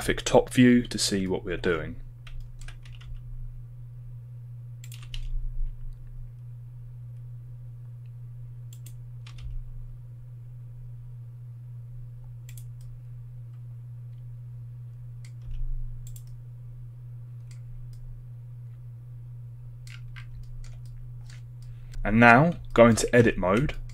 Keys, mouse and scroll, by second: 0.0 s, 0.0 KP_7, 1.2-1.6 shift+middle drag, 2.4 shift+middle drag, 20.4 shift+middle drag, 22.8 shift+middle click, 23.6 shift+Tab, 23.7 shift+click.